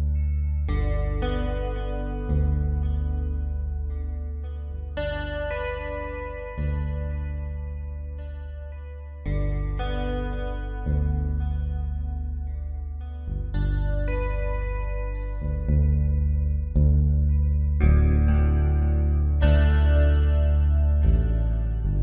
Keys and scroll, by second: 1.5 ctrl+t, 3.8 Return, 4.7 space, 6.8 space, 13.5 ctrl+z, 16.0 ctrl+j, 20.9 Down, 21.1 Down.